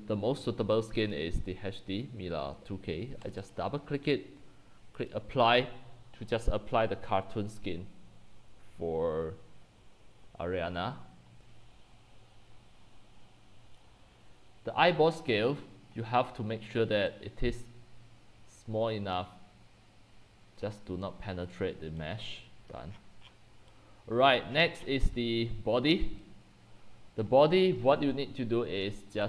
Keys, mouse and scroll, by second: 1.1-4.7 drag, 5.2-10.3 drag, 11.4 scroll, 11.5 c, 11.5 c, 11.6 c, 11.8 c, 13.7-14.1 drag, 14.1-14.5 scroll, 20.7 click, 21.6 click, 21.9-24.1 typing, 23.0 click, 23.3-23.7 scroll down 15, 24.3 click, 24.6-25.1 scroll down 10, 25.1 scroll, 27.3-29.2 drag.